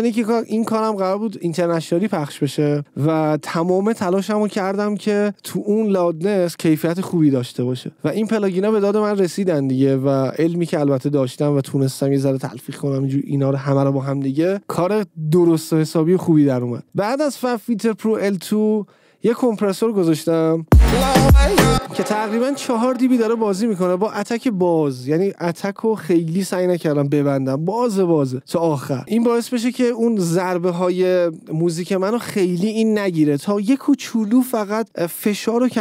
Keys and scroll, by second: 20.9 space.